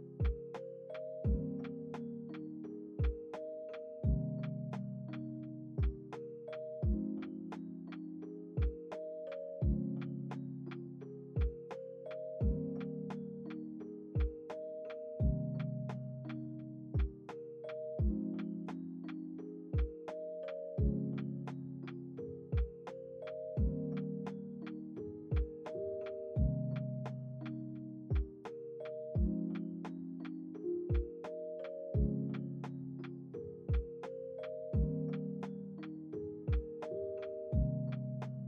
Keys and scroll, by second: 9.5 space, 22.0 Delete, 25.9 space, 28.3 space, 28.8 ctrl+s, 34.4 F9, 35.6 ctrl+s.